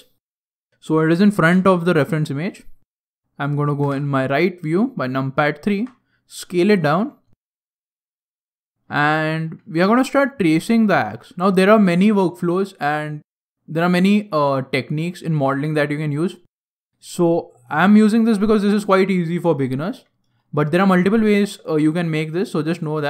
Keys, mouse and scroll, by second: 0.4-1.3 scroll down 1, 1.3 KP_1, 2.1 middle click, 2.1-3.7 scroll down 2, 3.7 KP_3, 5.6 s, 7.0 click, 7.2-7.7 scroll up 6, 7.7 scroll down 1, 8.0 shift+middle click, 8.5 scroll down 1, 9.0 shift+middle click, 9.3 shift+middle click, 9.3 shift+scroll down 1, 9.3 shift+scroll up 1, 9.7 Tab, 10.6 shift+scroll down 2, 10.7 shift+middle click, 16.3-16.8 scroll down 4, 16.8 shift+middle click, 18.5-20.2 scroll up 2, 20.2 scroll up 1, 20.3 shift+middle click.